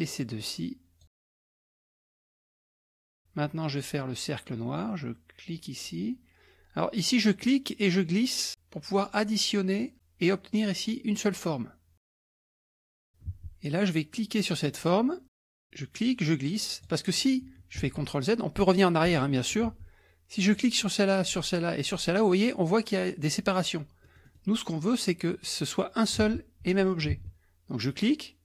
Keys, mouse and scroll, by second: 1.2 alt+Tab, 2.1-2.7 scroll up 2, 2.7 scroll down 1, 2.8 middle click, 5.6 click, 7.4-9.5 drag, 12.5 alt+Tab, 13.3 alt+Tab, 14.8 click, 16.0-17.3 drag, 17.9 ctrl+z, 19.7 ctrl+z, 20.5 click, 21.3 click, 24.1 middle click, 26.2 alt+Tab, 27.1 alt+Tab, 27.9-28.4 drag.